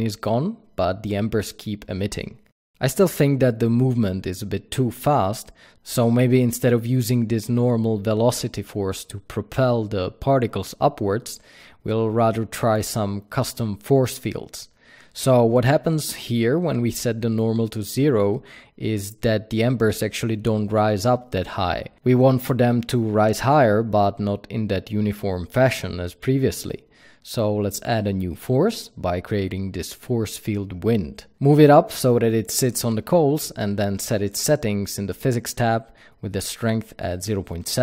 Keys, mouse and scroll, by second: 11.4 click, 17.1 shift+a, 17.8 click, 19.3 drag, 19.8 click, 24.1 shift+a, 27.8 g, 28.1 Escape, 28.4 g, 30.4 click.